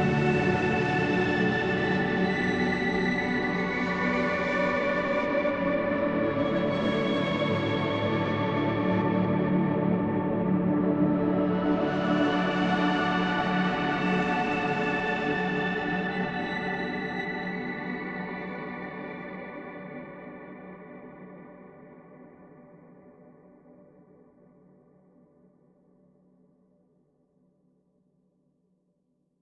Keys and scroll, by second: 8.2 c, 18.1 F9.